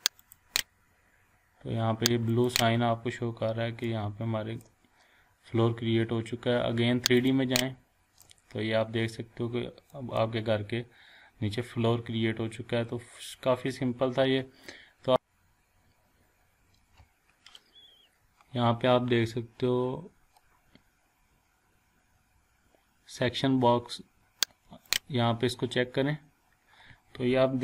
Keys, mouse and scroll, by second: 0.4 click, 3.9-4.8 shift+middle drag, 7.2 click, 8.2-10.1 shift+middle drag, 18.6-19.2 scroll down 1, 19.2 scroll, 19.3 scroll up 1, 21.6-23.1 scroll down 1, 26.0 click.